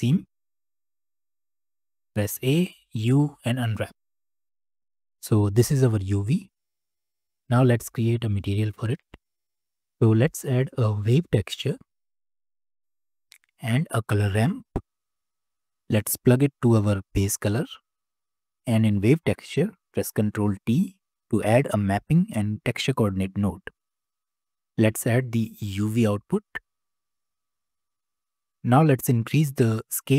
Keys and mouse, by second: 2.4 a, 2.9 u, 8.2-9.6 drag, 11.2 shift+a, 14.0-15.6 drag, 16.6 click, 16.9-17.6 drag, 18.6 click, 20.5 ctrl+t, 21.1 click, 25.8 click, 26.0-27.2 drag, 28.2-30.1 drag.